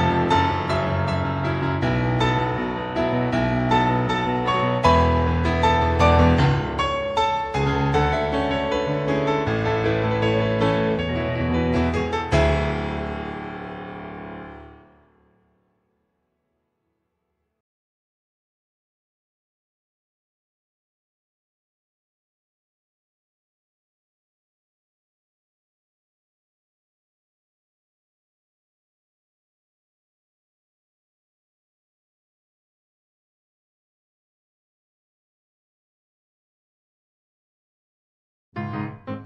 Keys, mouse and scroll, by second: 0.0 click, 1.0-1.4 scroll down 1, 1.5 shift+middle click, 2.2-2.9 scroll down 2, 3.7 middle click, 5.3 middle click, 7.1 alt+middle click, 9.4-9.7 scroll up 1, 9.9 shift+middle click, 13.0 ctrl+Tab, 13.9 click, 15.6 click, 20.6 click, 22.3 click, 27.6 shift+middle click, 28.1-29.6 scroll up 5, 28.5 shift+middle click, 29.8 click, 30.3 click, 36.7 click.